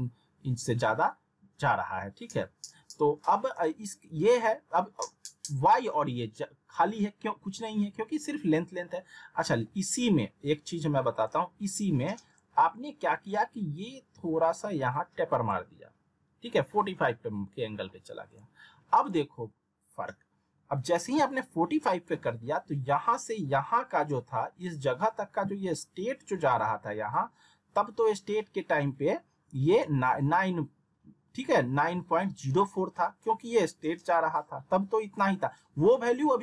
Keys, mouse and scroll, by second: 9.4 middle click, 11.1-15.6 drag, 18.3 click.